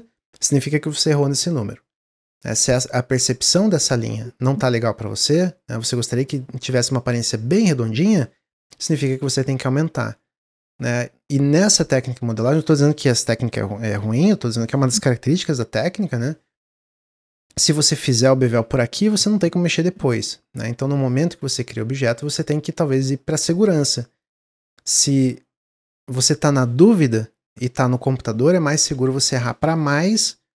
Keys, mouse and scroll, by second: 8.0 drag, 8.3 scroll down 2, 8.6 ctrl+z, 8.9 ctrl+z, 9.1 ctrl+z, 9.4 ctrl+z, 9.7 ctrl+z, 9.9 ctrl+z, 10.2 ctrl+z, 10.4 ctrl+z, 10.9-11.3 scroll down 1, 11.3 middle drag, 11.5 ctrl+z, 11.8 ctrl+z, 12.0-15.0 ctrl+middle drag, 15.3-16.9 middle drag, 16.9 ctrl+z, 17.3 ctrl+z, 17.6 middle click, 18.3 ctrl+b, 22.1-25.2 drag.